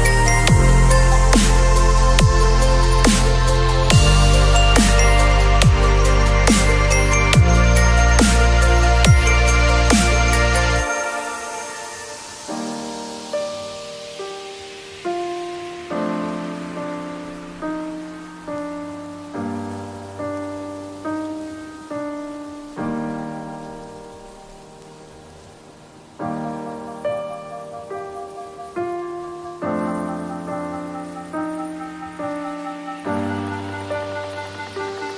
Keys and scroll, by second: 7.2 b, 16.1 ], 18.4 v, 21.8 ctrl+w, 22.4 ctrl+v, 22.7 ctrl+t, 31.8 space, 33.8 ctrl+t.